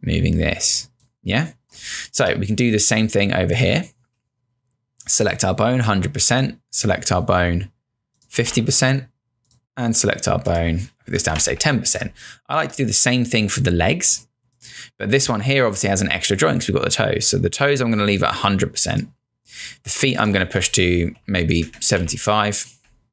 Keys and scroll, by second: 1.8 space, 8.2-9.0 typing, 11.1-12.1 typing, 20.3-22.0 typing, 22.8 Return.